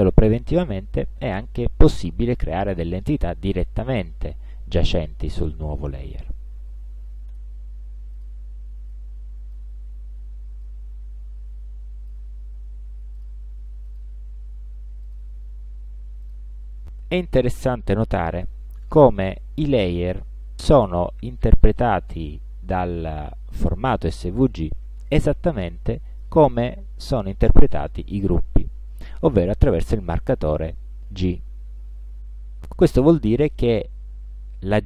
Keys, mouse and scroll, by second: 0.5-2.7 drag, 5.0 click, 7.4 space, 8.3 click, 9.0-9.9 drag, 10.7-12.4 drag, 13.3 click, 14.0 click, 15.1 click, 16.3 click, 20.1 click, 21.2 click, 21.7 click, 23.8 click, 26.2 click, 33.6 click.